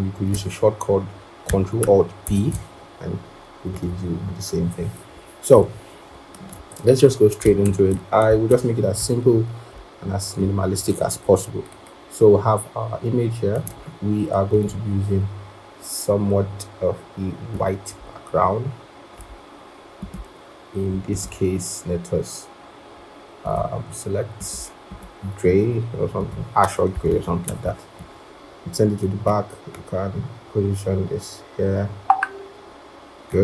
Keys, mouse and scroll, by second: 2.2 ctrl+alt+b, 4.8-5.1 scroll, 5.5 right click, 7.5 ctrl+=, 9.4-10.2 scroll, 27.4 ctrl+shift+[.